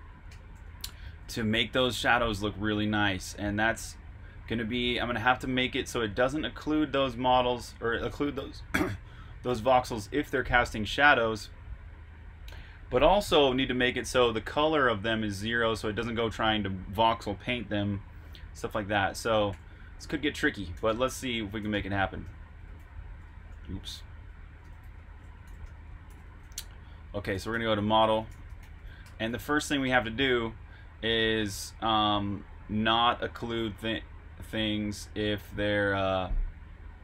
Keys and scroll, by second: 0.0-1.0 typing, 3.3 typing, 20.5-23.6 typing, 24.6 Escape, 25.2-26.2 typing, 27.2-31.0 typing, 32.9-34.6 typing, 36.5-37.0 typing.